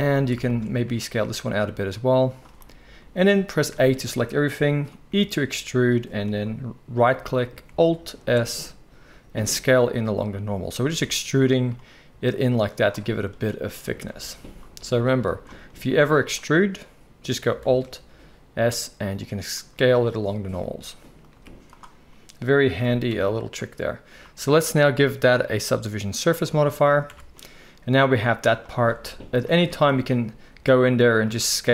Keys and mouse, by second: 0.1 alt+a, 0.5 alt+shift+middle click, 0.5 alt+shift+right click, 0.8 s, 2.6 right click, 3.0-6.4 drag, 3.7 a, 5.1 e, 6.4-11.5 middle drag, 8.2 alt+s, 10.9 z, 12.5 z, 13.9 alt+s, 15.9 z, 17.6 alt+s, 20.4-25.0 middle drag, 20.4 s, 21.3 z, 22.8 g, 25.0-31.3 drag, 27.0 Tab, 29.0 z, 29.5 Tab, 30.4 s, 31.3-31.7 middle drag, 31.4 z.